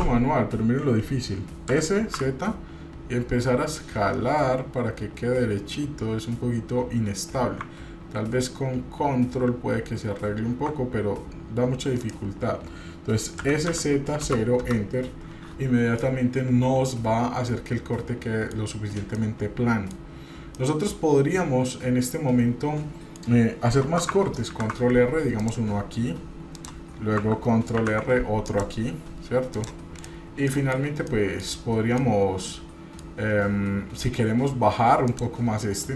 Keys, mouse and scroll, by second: 1.7 s, 13.4 s, 16.0-18.6 middle drag, 19.1 middle click, 20.6-23.2 middle drag, 24.5 ctrl+r, 27.8 ctrl+r, 30.0 right click, 31.0 middle click, 31.6 scroll up 1, 31.9-33.1 middle drag, 35.1 click.